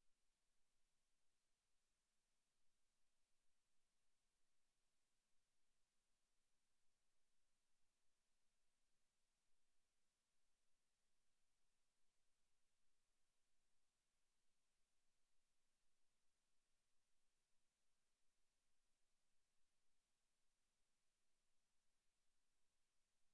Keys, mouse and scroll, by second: 1.0 click, 1.8 click, 5.0 click, 5.7 click, 10.5 scroll up 3, 10.9 Tab, 12.5 Tab, 13.0 right click, 16.7 click, 17.7 right click, 18.6 click, 19.3 click, 20.4 right click, 21.2 click, 21.8 click, 22.6 Tab.